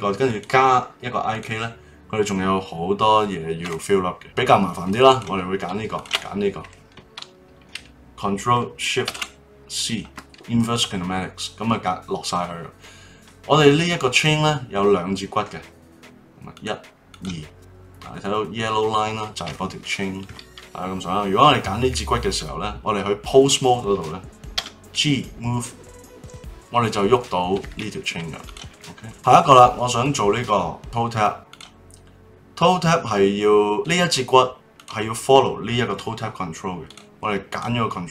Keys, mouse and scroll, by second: 0.2-3.2 drag, 4.2 click, 5.1 click, 5.9 shift+click, 9.0 ctrl+shift+c, 16.5-20.2 drag, 24.5 g, 28.4 click, 29.0-30.0 middle drag, 30.0 click, 31.5 click, 33.7 click, 34.7 click, 36.8 click, 37.5 click.